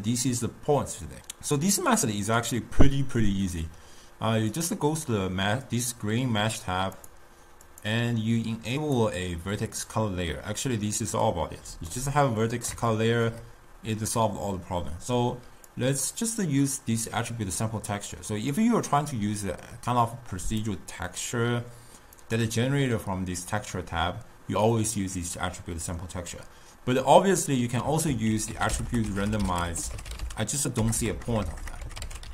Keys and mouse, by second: 2.6 click, 4.6 click, 7.3-11.6 drag, 11.6 middle click, 15.9 click, 20.7-22.6 drag, 28.3 ctrl+a, 29.3 t, 31.0 BackSpace, 31.3 BackSpace, 31.8 BackSpace, 31.9 BackSpace.